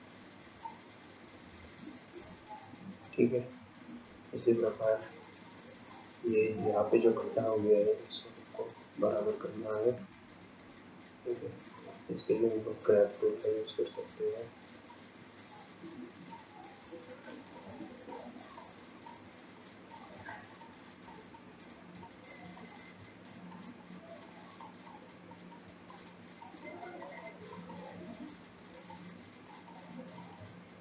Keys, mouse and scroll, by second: 1.1-2.7 scroll down 13, 2.8-4.4 scroll up 7, 4.5-5.1 scroll up 3, 5.1-6.5 scroll up 1, 6.5-8.0 scroll down 2, 8.0-9.6 scroll up 2, 11.1 scroll down 1, 13.8 click, 15.0 click, 19.6 click, 20.0-20.3 scroll down 1, 20.3 click, 21.1 click, 23.0 click, 23.3 click, 24.7 click, 26.5 click, 27.1-30.8 click.